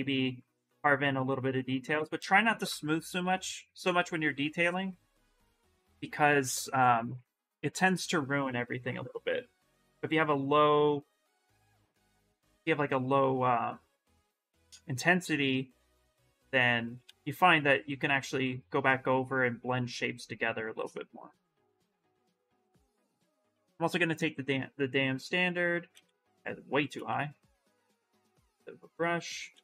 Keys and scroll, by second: 2.4 s, 3.6 s, 8.3 s, 11.3 ctrl+z, 11.5 ctrl+z, 11.6 ctrl+z, 11.8 ctrl+z, 12.4 s, 15.8 space, 22.2-23.6 typing, 25.7 ctrl+z, 25.9 space, 26.9 s, 29.4 ctrl+z.